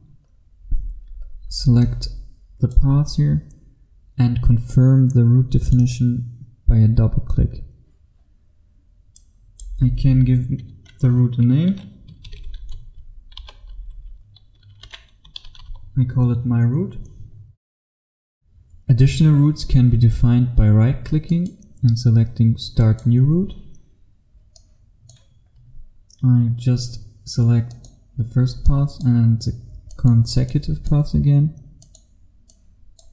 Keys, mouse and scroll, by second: 0.3-1.5 scroll down 1, 1.9 click, 10.7 BackSpace, 12.3 shift+m, 12.7 y, 13.5 shift+r, 14.9-16.2 typing, 18.8 F1, 21.4 right click, 22.8 click, 24.3-24.6 scroll down 1, 24.6 click, 25.6-27.7 scroll up 1, 27.7 click, 28.3-28.7 scroll down 1, 28.7 click.